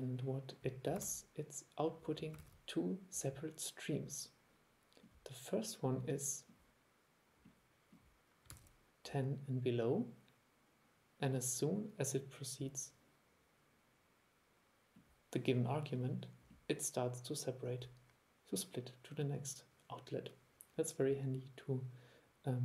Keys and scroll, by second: 1.1 super+3, 2.5 super+3, 8.6 super+e.